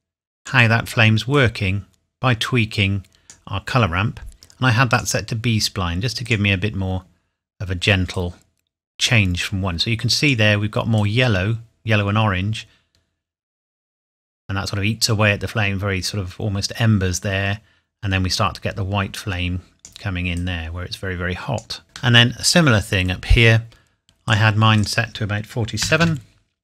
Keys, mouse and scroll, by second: 22.1 middle click, 24.3 click, 25.8 KP_4, 26.0 KP_7.